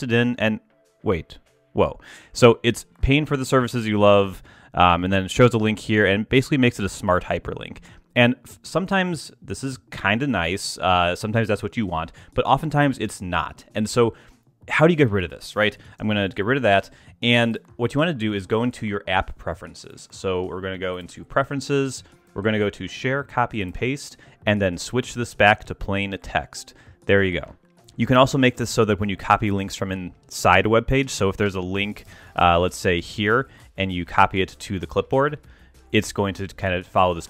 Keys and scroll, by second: 15.7 super+a, 15.9 super+BackSpace, 16.8 BackSpace, 32.1 ctrl+shift+Tab.